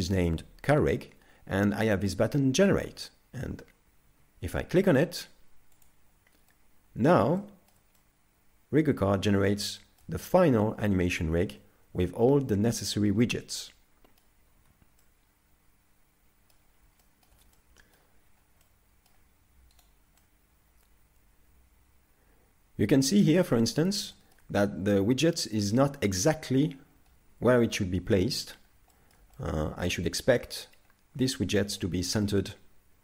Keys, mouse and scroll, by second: 4.1 z, 5.8 click, 6.5 middle click, 7.4 shift+middle click, 8.0 middle click, 9.8 shift+middle click, 11.5 middle click, 14.6 z, 15.0 middle click, 17.0 shift+middle click, 17.6 middle click, 18.3 scroll up 2, 18.7 middle click, 19.8 right click, 20.2 middle click, 24.1 shift+middle click, 24.6 middle click, 28.9 shift+middle click, 29.4 middle click, 31.8 middle click, 32.0 shift+middle click.